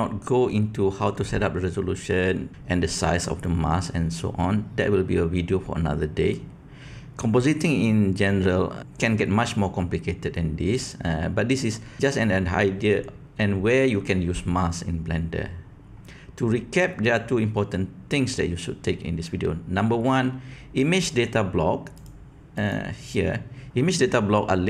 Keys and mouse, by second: 21.9 click.